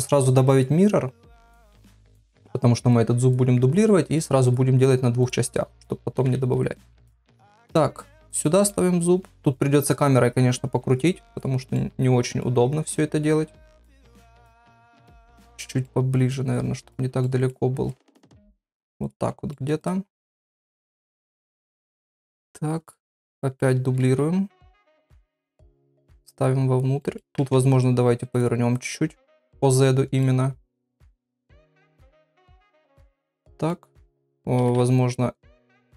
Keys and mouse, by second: 0.6 click, 1.6 click, 2.9 click, 3.8 click, 4.4 click, 5.2 click, 6.2 KP_3, 7.4 shift+d, 8.6 middle click, 9.9-11.1 drag, 11.3 click, 11.7 middle click, 13.7 KP_3, 15.0 click, 15.8 middle click, 17.2 middle click, 17.9 click, 19.5 middle click, 19.8 click, 20.2 middle click, 21.1 KP_3, 22.8 click, 23.3 shift+middle click, 24.0 shift+d, 25.1 middle click, 26.2 click, 27.0 middle click, 27.4 r, 28.8 click, 29.5 middle click, 31.1 click, 32.1 click, 32.7 click, 33.0 middle click, 34.1 click, 34.6 r.